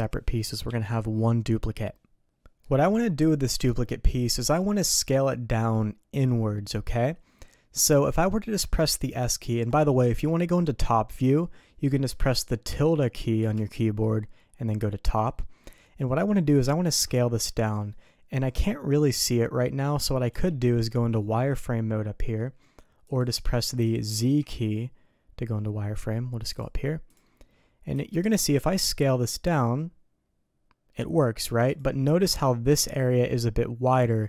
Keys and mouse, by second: 2.6 click, 3.6 Tab, 4.5 a, 7.4 middle click, 9.9 middle click, 13.4 `, 16.8 s, 23.0 click, 23.7 click, 24.1 z, 27.1 click, 27.9 s.